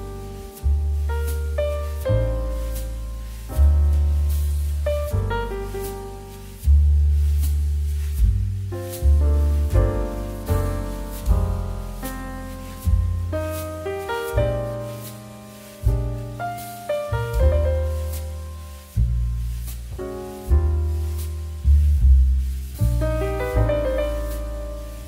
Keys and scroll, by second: 8.1 1, 9.8 2, 11.8 2, 15.4 2, 17.2 3, 20.2 ctrl+h, 20.4 ctrl+space.